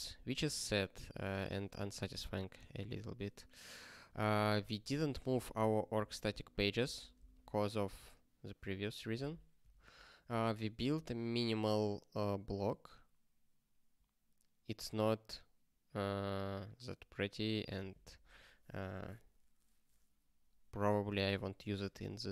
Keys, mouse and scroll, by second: 5.2 ctrl+space, 5.2 ctrl+p, 7.1 ctrl+space, 7.2 ctrl+p, 9.6 ctrl+n, 9.7 ctrl+n, 10.2 ctrl+space, 10.3 ctrl+n.